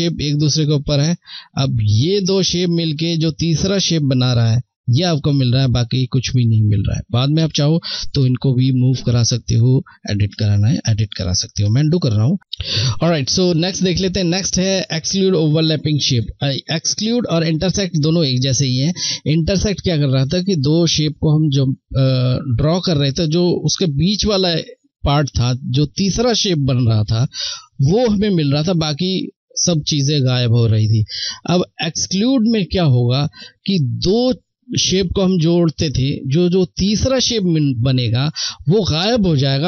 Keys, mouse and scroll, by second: 11.0 ctrl+z, 12.4 click, 13.2 click.